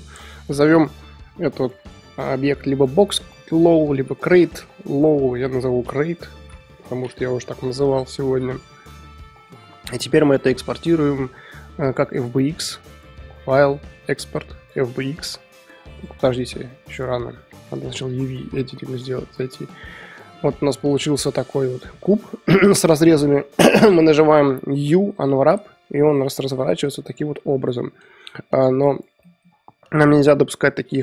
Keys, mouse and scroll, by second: 7.9 click, 8.5-10.1 middle drag, 10.1 click, 12.5-15.7 drag, 17.6 click, 18.7 middle click, 19.0-19.4 scroll up 4, 19.4 a, 19.8 shift+middle click, 20.2 scroll down 3, 20.3-25.4 middle drag, 25.4 u.